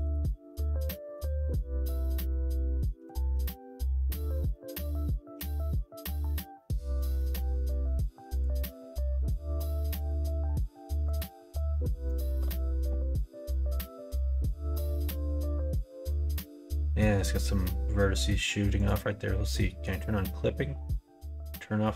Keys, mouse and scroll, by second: 0.7 middle click, 2.2 middle click, 3.7 middle click, 5.2 q, 9.9-15.2 drag, 16.0 middle click, 16.9 middle click, 18.7 click, 21.3 click.